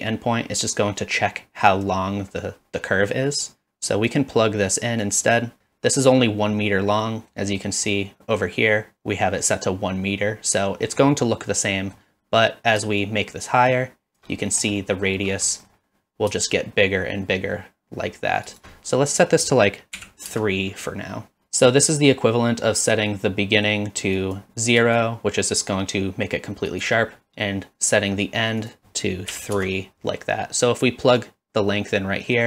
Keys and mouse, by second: 4.1-5.1 drag, 5.6 middle click, 7.1 middle click, 7.7 middle click, 11.3 middle click, 13.2-14.2 shift+drag, 14.8 middle click, 15.6 middle click, 16.4-18.6 shift+drag, 19.1-20.7 drag, 24.2 drag, 25.0-26.9 shift+drag, 28.8-30.1 drag, 31.4-32.4 drag.